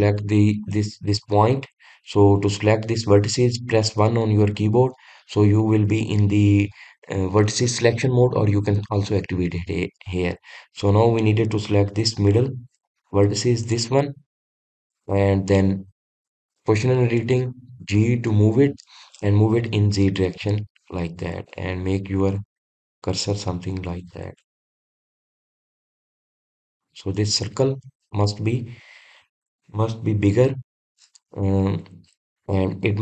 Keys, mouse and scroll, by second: 0.3 click, 1.5 click, 11.6-14.5 middle drag, 14.5 click, 15.1-18.2 middle drag.